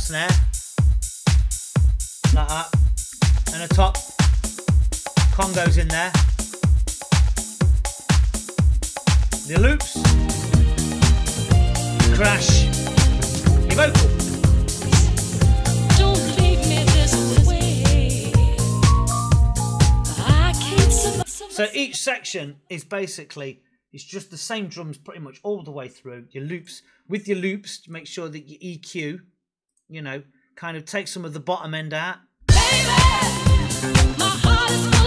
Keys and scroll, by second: 21.0 space, 32.3 space.